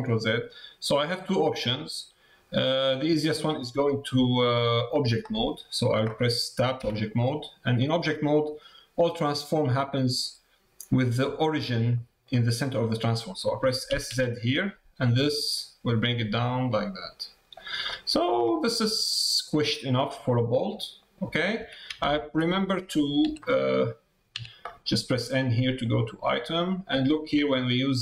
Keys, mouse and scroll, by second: 3.4 middle click, 6.8 Tab, 7.2 middle click, 8.4 middle click, 9.9 middle click, 11.9 middle click, 12.8 middle click, 17.8 middle click, 18.7 middle click, 19.6 middle click, 20.7 middle click, 25.8 click.